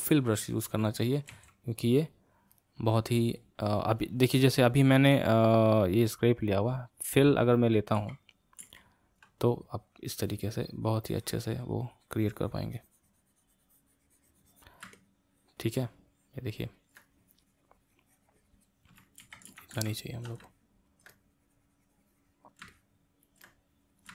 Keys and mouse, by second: 1.3 f, 2.6-6.5 drag, 6.9-8.2 drag, 8.2 ctrl+z, 8.9 ctrl+z, 9.5-12.6 drag, 14.9-17.0 middle drag, 17.0-19.5 drag, 19.5 ctrl+z, 19.7 ctrl+z, 20.0 ctrl+z, 20.5 middle click, 21.1-22.7 drag, 22.7 middle click, 23.5 click.